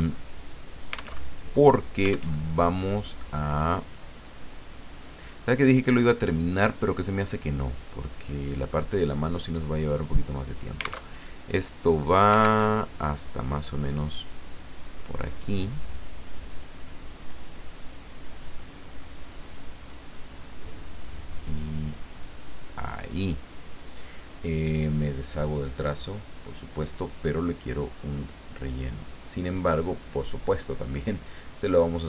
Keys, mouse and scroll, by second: 0.0 alt+Tab, 1.2 alt+Tab, 2.4 alt+Tab, 4.9 click, 5.8 click, 7.8 click, 8.9 click, 11.1 alt+Tab, 12.7 alt+Tab, 15.1 click, 17.5-19.3 drag, 20.1-21.2 drag, 22.7 click, 25.4 click, 26.2 click, 28.7 click, 31.2 click.